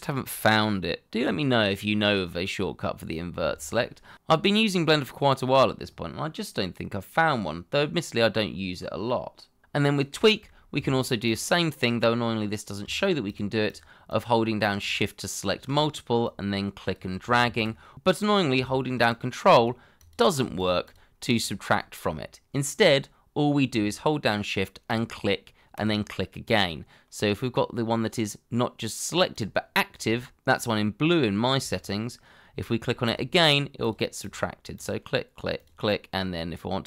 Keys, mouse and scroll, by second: 11.3 shift+click, 13.3 shift+click, 17.4 ctrl+z, 19.1 ctrl+click, 20.6 shift+click, 20.8 shift+double click, 21.4 shift+click, 24.9 shift+click, 29.3 shift+click, 31.4 scroll up 1, 31.8 shift+middle click, 33.1 shift+click, 34.2 shift+click, 35.6 shift+click.